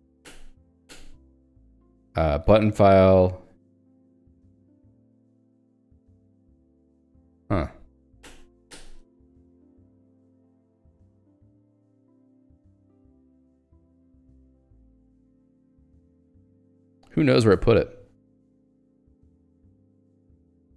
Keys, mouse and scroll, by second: 2.4 b, 5.5 d, 7.2 Return, 10.9 e, 14.4 s, 15.5 ctrl+g, 16.6 Escape, 18.5 j, 20.2-20.7 typing.